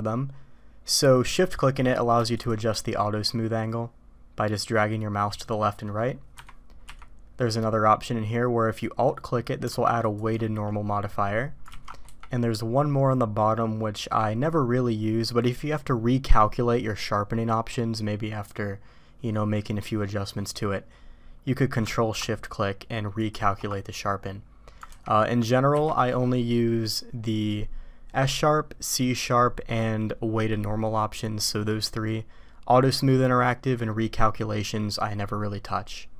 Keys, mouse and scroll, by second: 6.8 q, 11.7 ctrl+z, 12.0 q, 24.9 ctrl+z, 25.7 q.